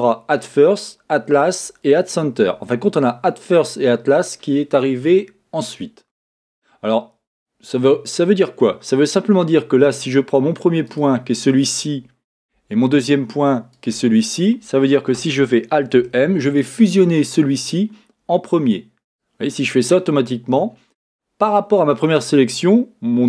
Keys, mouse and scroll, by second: 10.8 click, 13.7 shift+click, 13.9-19.9 middle drag, 15.9 alt+m.